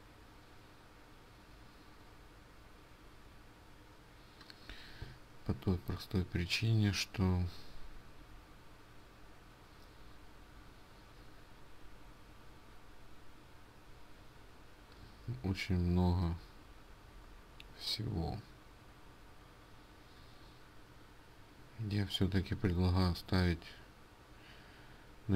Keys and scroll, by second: 6.7-7.9 scroll down 1, 7.9-9.4 scroll down 1, 9.4 scroll up 1, 10.3-10.7 scroll down 3, 16.4 Right, 17.2 Right.